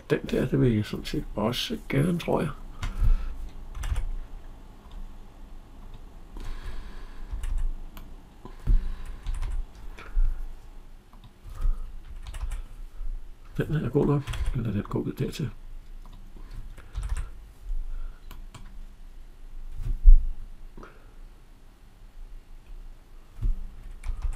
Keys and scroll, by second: 7.2 Escape, 16.8 Escape, 23.9 Escape.